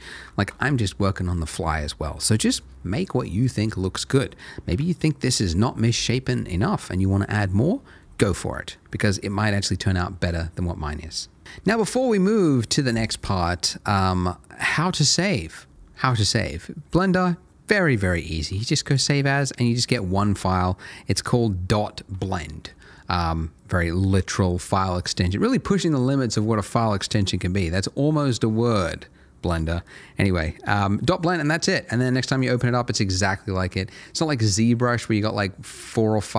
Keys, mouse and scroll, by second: 0.3 shift+middle click, 2.4 middle click, 4.7 Tab, 4.9 middle click, 8.0 middle click, 16.9 click, 32.3 click.